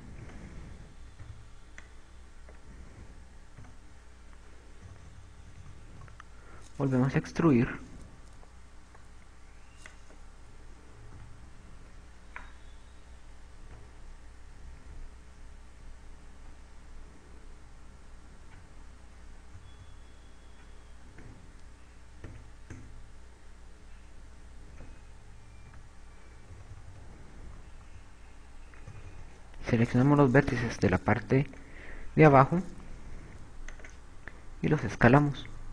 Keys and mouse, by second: 0.0-1.1 typing, 2.2 b, 4.5 z, 5.1 KP_4, 6.3 KP_4, 6.7 KP_4, 6.9 KP_4, 7.1 KP_2, 8.2 e, 11.3 click, 12.0 e, 22.5 Escape, 22.7 Escape, 24.2 ctrl+z, 26.5 a, 28.5 KP_6, 28.7 KP_2, 28.9 KP_2, 30.1 KP_6, 30.3 KP_6, 31.1 b, 35.0 click.